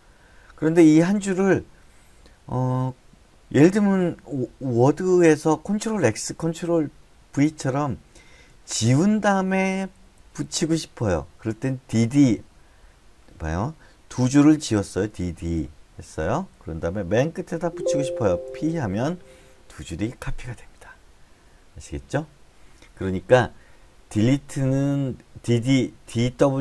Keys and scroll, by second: 0.8-1.7 typing, 8.9-11.4 typing, 13.2-15.8 typing, 17.0 j, 17.2-18.1 j, 18.9 p.